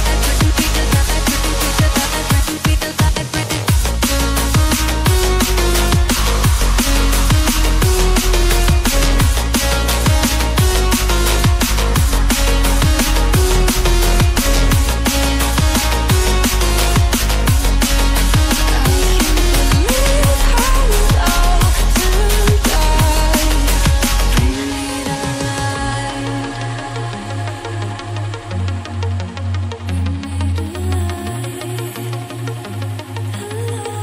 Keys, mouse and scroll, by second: 1.0-1.5 scroll up 1, 1.5 click, 2.9-3.2 scroll down 1, 4.1 scroll up 1, 5.4 click, 5.6 double click, 6.0 click, 7.3 click, 9.4-10.5 scroll down 1, 10.5 scroll up 1, 11.2 click, 14.2-15.3 scroll down 1, 15.3 click, 17.0 scroll up 1, 17.8 click, 20.1-20.9 scroll down 1, 23.0 click, 29.8 scroll up 1, 30.9 click, 32.3-34.0 scroll down 1.